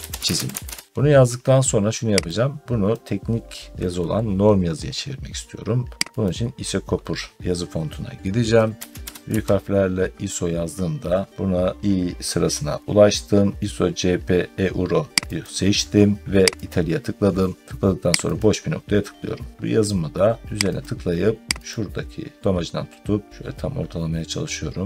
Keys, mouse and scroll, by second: 0.0-1.7 typing, 2.8 click, 6.1 click, 7.2 scroll down 1, 7.3-8.6 scroll, 8.6 Caps_Lock, 10.7 typing, 11.3 scroll, 12.1 scroll, 15.3 click, 16.6 click, 18.2 click, 19.7 middle click, 20.6 click, 21.6 click.